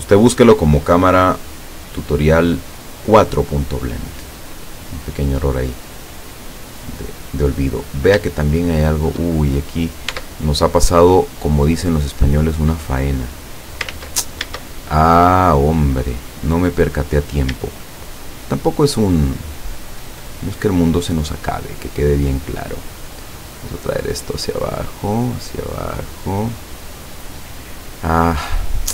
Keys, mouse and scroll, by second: 4.8-5.1 scroll down 2, 5.8-7.7 drag, 7.7-8.2 scroll up 2, 8.5 shift+middle click, 9.7 shift+right click, 10.2 shift+Tab, 11.6 right click, 12.6-14.0 drag, 14.0 ctrl+z, 14.8 shift+middle click, 15.9-17.0 middle drag, 17.1-17.4 scroll up 1, 18.1 shift+right click, 19.3 shift+right click, 20.7-21.9 shift+middle drag, 22.0 middle click, 23.3-27.1 drag.